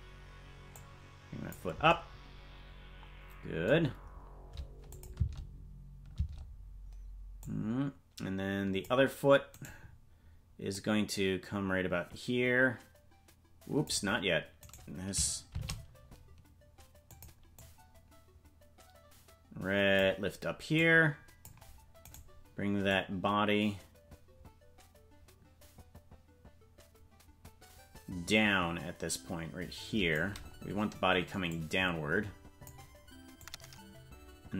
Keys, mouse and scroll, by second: 0.7 click, 4.9 click, 5.1 space, 7.4-8.9 drag, 7.4 space, 9.7 right click, 10.7-13.9 drag, 14.6 right click, 15.5 shift+d, 17.5-20.0 drag, 20.7 click, 22.1 right click, 22.9-30.2 drag, 31.4-32.7 drag, 33.4-34.5 drag.